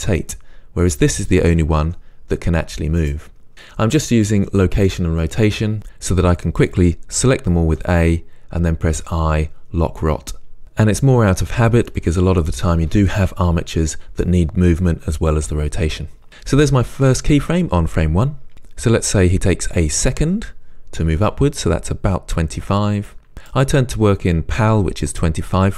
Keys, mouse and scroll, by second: 0.8 click, 1.9 g, 3.1 right click, 7.7 a, 23.1-25.7 right drag.